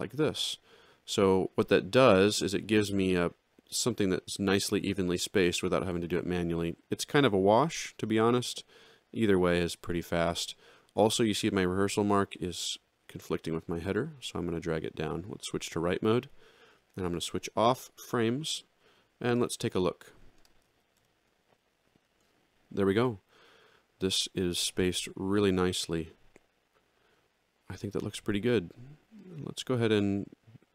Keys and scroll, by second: 8.1 z, 15.8 ctrl+2, 17.7 F10, 20.7 alt+x.